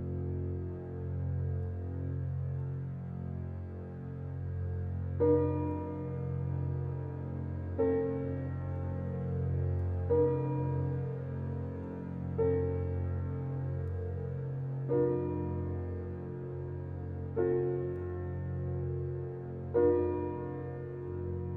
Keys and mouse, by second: 3.6 3, 4.1 Return, 5.2 click, 6.1-7.1 drag, 6.9 3, 7.3 Return, 8.0 click, 9.6 ctrl+s, 10.9 click, 13.2 click, 14.0 click, 15.3 click, 16.0 ctrl+s, 17.4 click, 20.6 click.